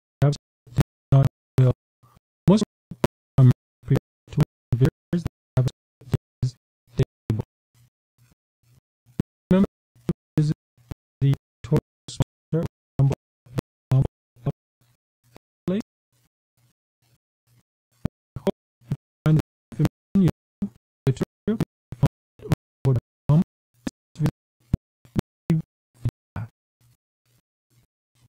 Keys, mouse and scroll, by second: 5.9-7.9 scroll up 3, 9.4 click, 19.0 click, 24.7-26.9 scroll down 2, 27.2 click, 28.2 q.